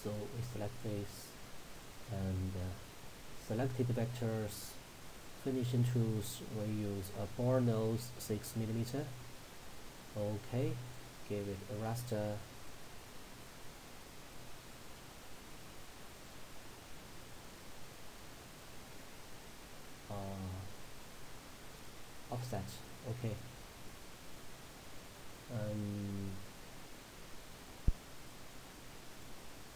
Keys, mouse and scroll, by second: 7.4-8.5 scroll down 1, 8.5 click, 14.7 click, 19.0 scroll down 1, 21.9 click, 22.7-23.5 scroll down 1, 26.7-27.2 scroll down 1, 29.2 click.